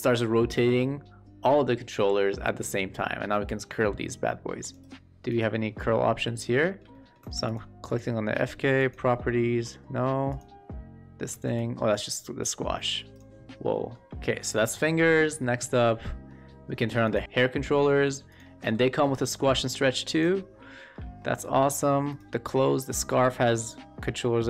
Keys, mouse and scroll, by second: 5.2 click, 5.9 shift+middle click, 6.6 shift+middle click, 6.8 middle drag, 7.4 drag, 7.4 q, 8.7 click, 9.4 shift+middle click, 11.2 w, 11.5-13.1 drag, 13.6 middle drag, 14.1 shift+middle drag, 14.7 shift+middle drag, 15.1 shift+middle drag, 15.6 shift+middle drag, 16.0 middle drag, 17.1 click, 18.3 click, 19.0-20.1 drag, 19.0 w, 20.7 shift+middle drag, 21.1 middle drag, 22.6 middle click, 23.2 shift+middle drag, 23.5-24.4 middle drag.